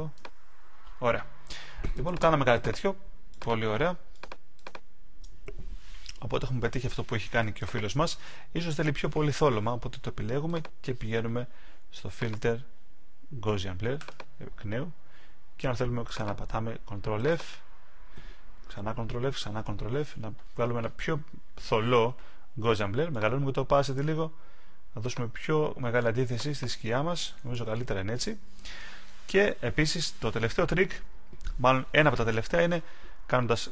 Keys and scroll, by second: 18.7 super+f.